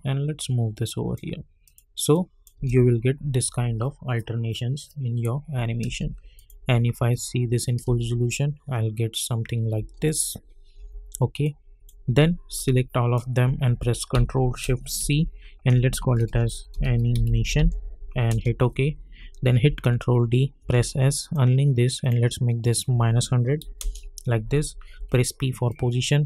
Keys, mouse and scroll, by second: 2.5 space, 5.8 space, 6.3 click, 7.8 space, 9.8 space, 10.0 click, 10.7 u, 11.4-15.0 drag, 15.0 ctrl+shift+c, 15.8-18.0 typing, 18.3 Return, 19.6 ctrl+d, 20.6 s, 21.2 click, 23.6 -, 23.8 Return, 24.9 p, 25.7 click.